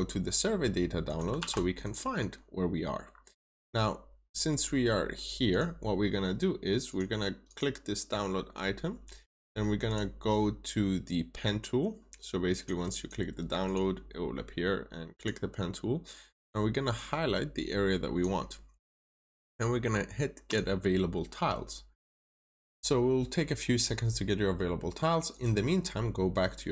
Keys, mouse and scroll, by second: 1.3 typing, 1.7 click, 3.0 scroll down 1, 5.4 click, 12.9 double click, 13.5 click.